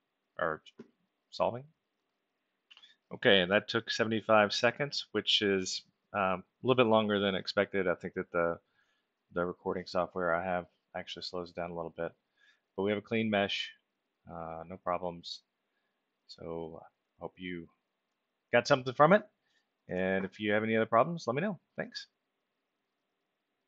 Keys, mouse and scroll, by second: 1.9 click, 11.6-16.6 alt+middle drag, 16.8 middle click, 17.3-18.2 alt+middle drag, 18.4-18.8 middle drag, 19.1 ctrl+alt+middle click, 23.6 click.